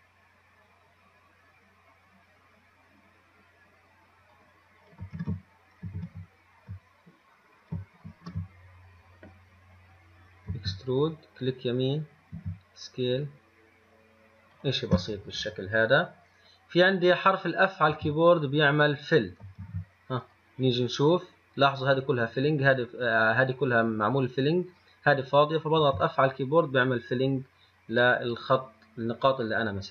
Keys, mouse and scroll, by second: 5.4 ctrl+z, 6.2 ctrl+z, 8.3 ctrl+shift+z, 10.8 e, 12.6 s, 18.1 f, 19.9 ctrl+z, 20.5 click, 26.1 f, 27.9-29.9 scroll up 3.